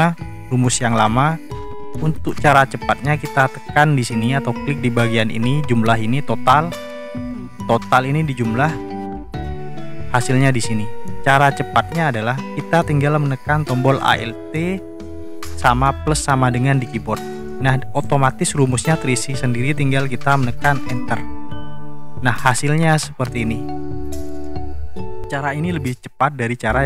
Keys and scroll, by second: 1.0 Delete, 16.8 alt+=, 20.9 Return.